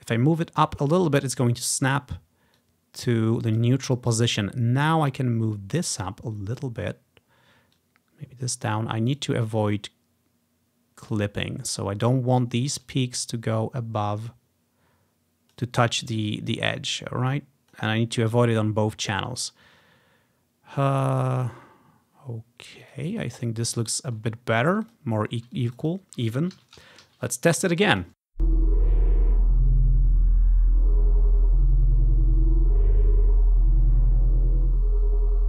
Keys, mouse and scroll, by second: 7.8 click, 9.2-11.2 drag, 11.5-12.2 scroll down 1, 13.1-15.6 drag, 16.8-17.8 drag, 22.9 click, 23.2 click, 23.5-24.3 ctrl+scroll down 1, 24.9 click, 25.6 click, 25.9 click, 26.6 ctrl+c, 26.9 Right, 27.2 ctrl+v, 28.0 ctrl+click, 28.1 v, 28.1 space, 28.2 space.